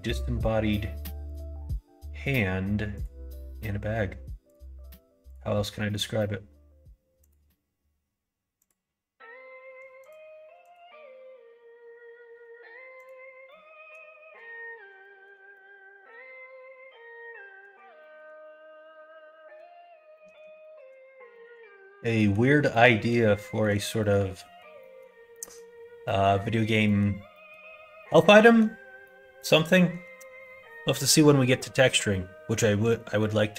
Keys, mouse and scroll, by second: 2.9 click, 4.4 click, 5.2 click, 5.8 middle click, 7.1 click, 8.6 click, 9.9 click, 10.6 click, 13.0 click, 13.5 middle click, 15.0 middle click, 15.5-17.6 middle drag, 17.9 shift+middle click, 18.4-19.6 middle drag, 20.1 middle click, 20.6 shift+middle click, 21.3 middle click, 21.7 middle click, 22.1 middle click, 22.7 middle click, 23.4 shift+middle click, 23.9 middle click, 24.4 middle click, 24.7 middle click, 25.3 middle click, 26.0 middle click, 26.4 middle click, 26.8 middle click, 27.3 middle click, 28.4 middle click, 29.0 middle click, 31.5 middle click.